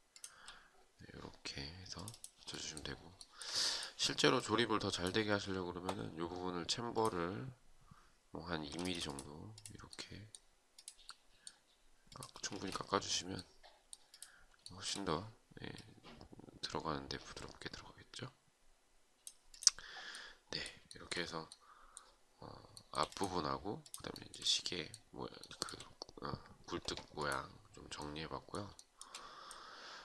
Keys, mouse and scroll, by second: 2.7 shift+right click, 8.3 space, 11.9 space, 14.2 shift+right click, 20.4 shift+right click, 22.2 shift+right click, 23.7 shift+right click, 23.9 shift+double right click, 24.9 shift+right click, 28.3 shift+right click.